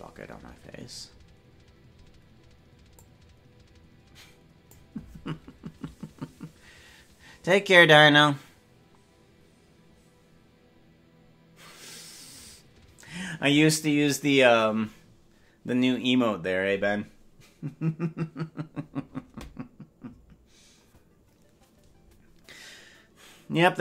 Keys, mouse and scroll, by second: 2.9-4.7 drag.